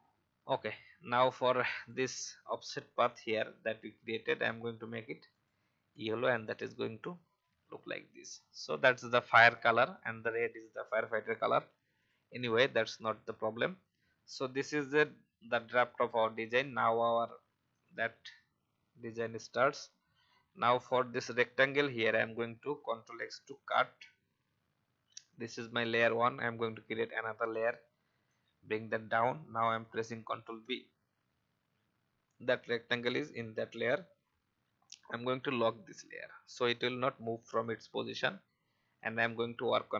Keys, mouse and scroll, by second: 1.7 click, 4.2 i, 5.3 click, 5.9 v, 8.3-8.7 alt+scroll down 1, 9.3-11.9 drag, 13.8 alt+scroll up 1, 15.8 click, 21.0 alt+scroll down 1, 21.7 click, 25.2 click, 35.4 click.